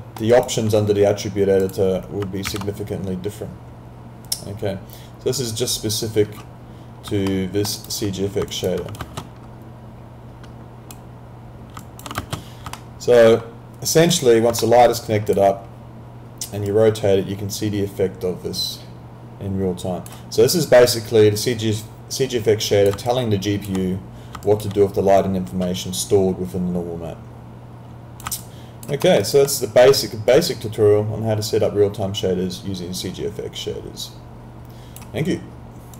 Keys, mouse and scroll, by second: 0.3 alt+right click, 1.6 click, 2.5 ctrl+a, 7.3 alt+middle click, 7.8 alt+right click, 8.8 alt+click, 9.0 ctrl+space, 12.2 ctrl+space, 12.8 alt+middle click, 14.1 click, 14.6 alt+middle click, 14.8 alt+right click, 15.3 click, 21.0 click, 23.0 alt+click, 25.2 click, 28.4 alt+click, 29.0 alt+middle click, 29.2 alt+right click, 30.3 click.